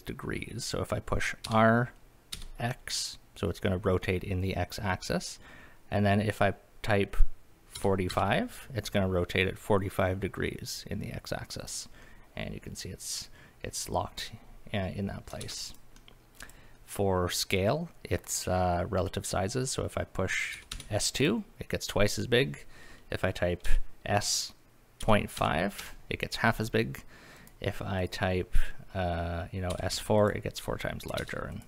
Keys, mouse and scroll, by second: 1.5 r, 2.3 x, 7.8 KP_4, 8.1 KP_5, 11.7 click, 12.0-13.9 middle drag, 15.4 ctrl+z, 15.7 click, 16.0 middle drag, 16.4 click, 16.7 middle drag, 20.5 s, 20.7 KP_2, 21.2 click, 23.6 s, 25.0 ., 25.4 KP_5, 25.8 Return, 27.4 click, 28.0 click, 29.7 s, 29.9 KP_4, 30.2 click, 31.2 ctrl+z, 31.5 click.